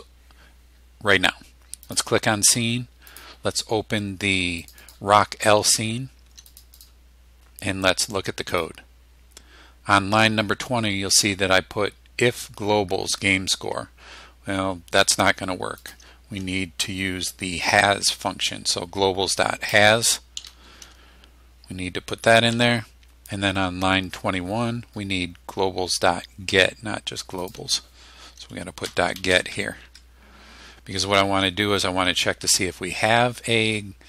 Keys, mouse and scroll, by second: 1.9 click, 3.1 click, 4.6 click, 6.5 click, 8.6 click, 15.9 click, 19.7-21.4 typing, 22.5 Tab, 27.5 click, 28.6-29.9 typing, 29.9 Tab.